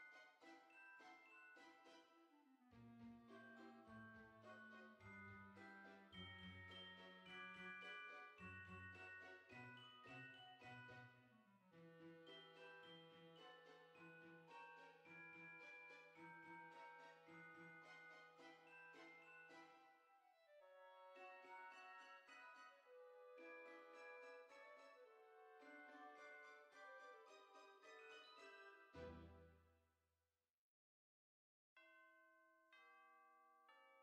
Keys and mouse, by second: 0.1 click, 1.1 click, 2.7 click, 3.8 click, 5.8 click, 6.2-7.6 typing, 9.2 click, 9.4 KP_0, 9.7 KP_Decimal, 9.9 KP_4, 10.7 click, 11.0 KP_0, 11.2 KP_Decimal, 11.5 KP_4, 13.7 click, 13.9 KP_0, 14.1 KP_Decimal, 14.4 KP_3, 14.8 Return, 14.8 KP_Enter, 16.0 click, 17.9 KP_1, 18.5 click, 22.0 click, 29.6 click, 32.7 click.